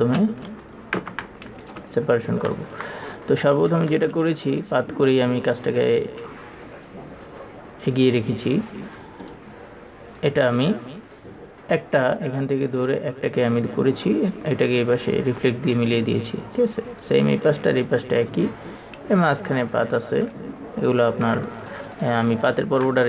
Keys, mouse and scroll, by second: 0.2 click, 1.4 ctrl+z, 2.1 click, 2.9 ctrl+click, 3.8 click, 20.4 ctrl+click, 22.0 ctrl+alt+super+click.